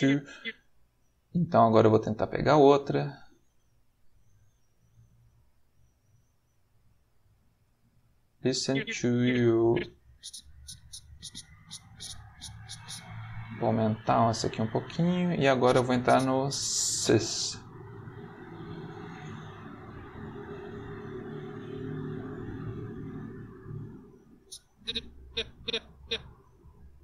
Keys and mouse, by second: 0.9-5.7 drag, 6.4 click, 8.7-12.8 drag, 13.8 click, 15.5-16.9 drag, 17.5-23.1 drag, 24.4-26.2 drag, 26.9 click.